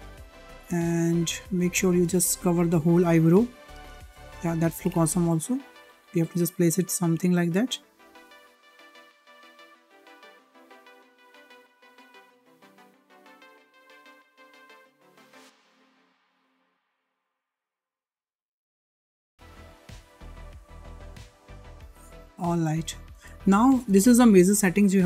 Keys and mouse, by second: 0.5 click, 1.4 click, 1.5 click, 2.6 click, 3.5 click, 4.5 click, 5.5 click, 5.5 click, 6.4 click, 6.5 click, 7.3 click, 8.1 click, 8.6 click, 8.7 click, 9.0 shift+middle click, 9.2 shift+middle click, 10.5 shift+click, 10.6 click, 10.8 click, 11.0 click, 11.2 ctrl+z, 11.4 click, 11.6 click, 11.7 shift+middle click, 12.0 click, 12.1 l, 12.2 click, 12.4 click, 13.9 shift+middle click, 14.1 click, 14.3 click, 14.3 l, 14.8 s, 15.1 click, 15.4 click, 15.7 click, 15.9 shift+middle click, 16.0 click, 16.2 click, 16.3 click, 16.5 click, 16.6 click, 16.7 click, 16.9 click, 17.1 click, 17.3 click, 17.4 click, 17.5 click, 17.7 click, 17.9 click, 18.3 click, 18.7 g, 19.1 shift+middle click, 19.2 shift+middle click, 19.3 shift+middle click, 19.5 click, 19.7 g, 20.0 click, 20.1 g, 20.5 shift+middle click, 20.7 click, 20.8 click, 21.5 shift+middle click, 23.3 shift+middle click.